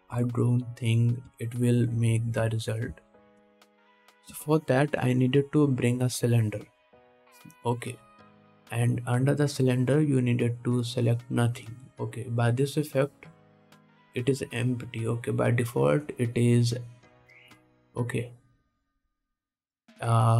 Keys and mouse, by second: 0.5-11.7 drag, 1.3 x, 3.5 ctrl+s, 4.9 shift+a.